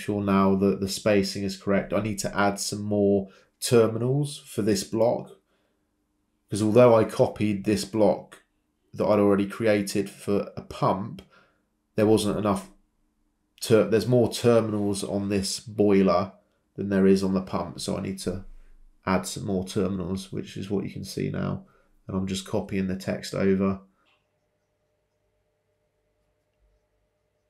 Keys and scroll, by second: 2.8 Escape, 4.0 typing, 4.9 Return, 5.9 typing, 7.6 Escape, 10.8 Delete, 13.7 Delete, 19.4 ctrl+c, 19.5 ctrl+v, 26.0-27.2 typing.